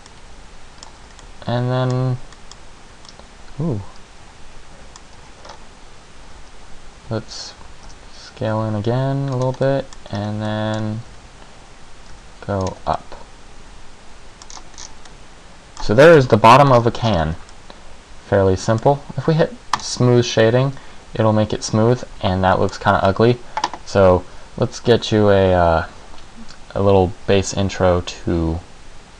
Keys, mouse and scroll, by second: 0.3 middle click, 1.2 Tab, 1.4 middle click, 2.5 middle click, 3.6 middle click, 5.6-6.4 scroll up 1, 6.4 e, 8.0 s, 9.6 click, 9.8 middle click, 10.3 scroll up 2, 10.6 middle click, 11.0 scroll down 1, 11.1 e, 12.8 click, 12.9 Tab, 13.2 middle click, 14.7 scroll down 3, 15.4 middle click, 15.4 scroll down 5, 16.3 KP_1, 17.0-17.4 scroll up 9, 17.7 middle click, 19.9 click, 20.5 middle click.